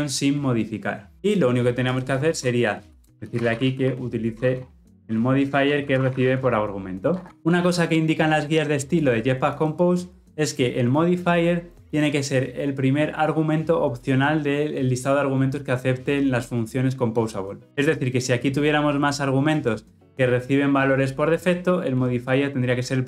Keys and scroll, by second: 5.4 Return.